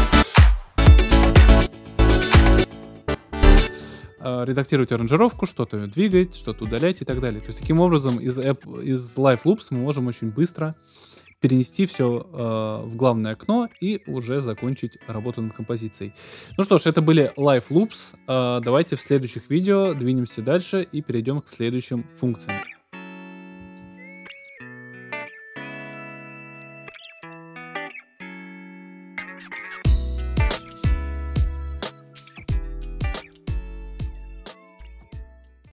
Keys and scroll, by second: 3.5 space.